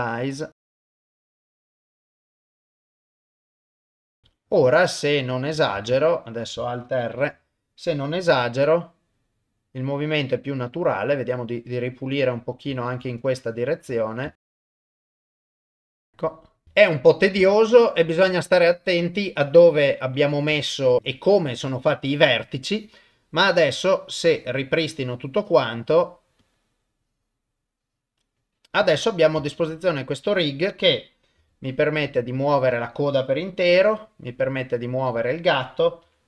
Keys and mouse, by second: 0.5 click, 1.1 click, 1.4 click, 2.5 click, 2.8 click, 3.3 ctrl+z, 3.4 click, 3.7 click, 4.1 click, 4.2 ctrl+Tab, 5.3 click, 5.8 ctrl+Tab, 6.2 click, 7.1 alt+r, 8.3 r, 14.2 ctrl+Tab, 14.4 click, 14.5 ctrl+Tab, 15.0 ctrl+z, 15.2 middle click, 15.5 click, 15.8 click, 16.6 ctrl+s, 16.7 ctrl+middle click, 17.5 shift+middle click, 18.4 ctrl+middle click, 20.8 ctrl+Tab, 21.0 click, 22.7 click, 24.3 click, 25.0-26.4 drag, 29.0 click, 29.6 ctrl+Tab, 30.0 click, 31.4 r, 32.7 click, 33.7 r, 35.1 click, 36.0 r.